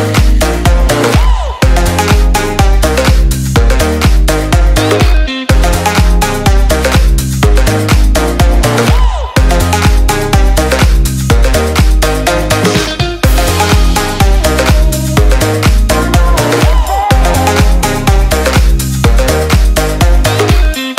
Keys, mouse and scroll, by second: 4.7-5.4 typing, 6.7 click, 11.8 BackSpace, 12.4 click, 14.6 ctrl+shift+s, 15.9 click.